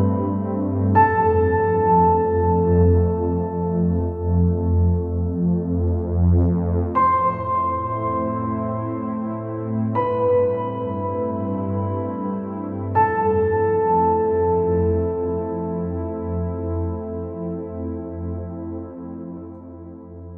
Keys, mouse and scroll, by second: 0.0 middle click, 0.7 middle click, 1.0 scroll down 2, 1.1-2.2 middle drag, 2.2 scroll down 3, 2.4 middle click, 3.2 scroll up 3, 3.8-4.2 scroll up 4, 4.2 scroll down 1, 4.4 middle click, 5.2 scroll up 2, 5.9 click, 6.5 click, 6.7-7.5 scroll down 4, 7.5-9.0 scroll down 3, 9.2 click, 9.7-10.2 scroll up 6, 10.9 click, 11.4 click, 14.8 alt+click, 16.6 p, 18.7 click, 20.0 click.